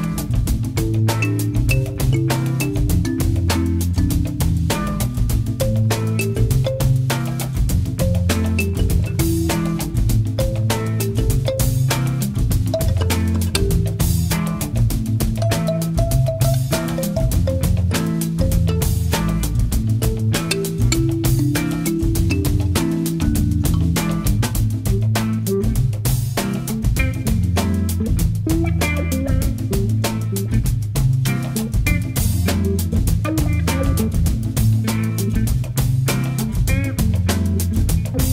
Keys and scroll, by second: 20.7 shift+space.